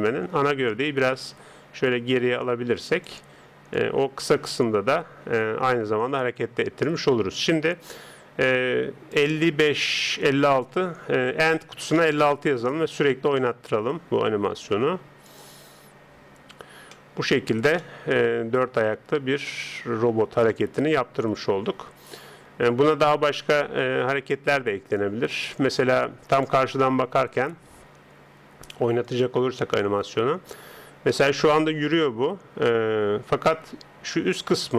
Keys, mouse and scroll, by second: 10.4 click, 13.1-15.3 middle drag, 15.3 click, 16.9-25.7 middle drag, 25.7 click, 27.2 KP_1, 29.0 click, 30.8-34.7 middle drag.